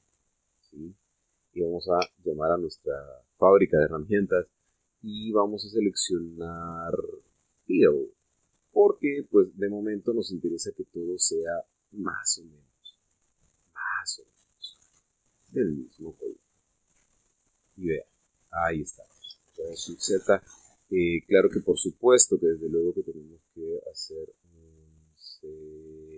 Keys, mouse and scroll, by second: 0.0 click, 1.2 scroll down 1, 1.8 scroll up 1, 2.9 t, 6.3 click, 8.7 click, 11.4-15.0 drag, 16.8 click, 18.2 click, 20.4 shift+z, 23.2 click, 23.7 click.